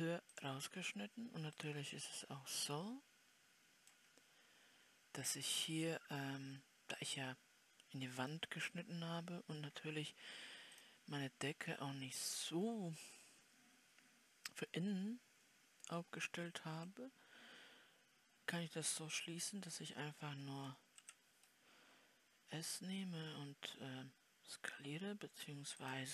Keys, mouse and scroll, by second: 2.9-5.2 middle drag, 5.2 scroll up 2, 6.3-8.9 middle drag, 8.9 scroll up 1, 9.1 scroll down 2, 10.0 scroll down 1, 10.0 scroll up 1, 11.2-17.1 drag, 17.1 KP_7, 19.1-20.6 scroll down 2, 20.6-21.2 scroll down 1, 21.2 s.